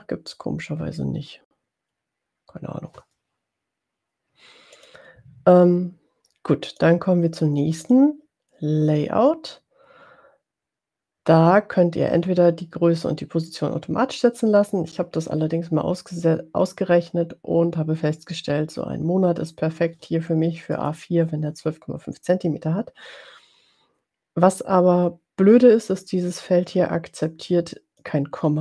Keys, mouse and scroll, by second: 5.0 click, 7.0 click, 8.1 click, 20.8 click, 27.7 click.